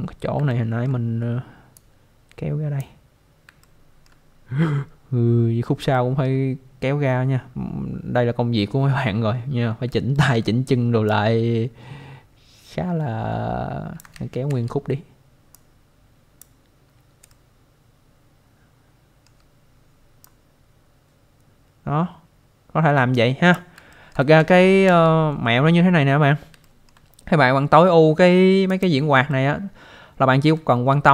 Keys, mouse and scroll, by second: 0.5 alt+middle click, 1.7 click, 3.6 alt+middle click, 5.4-5.8 scroll down 1, 5.9 alt+middle click, 7.1-7.4 scroll up 1, 10.1 alt+middle click, 11.1 click, 14.1 ctrl+z, 15.5 click, 17.3 shift+middle click, 20.2 click, 23.9 alt+middle click, 24.4 ctrl+z, 25.9 scroll down 1, 26.6 alt+middle click, 28.7 click, 29.3 alt+middle click.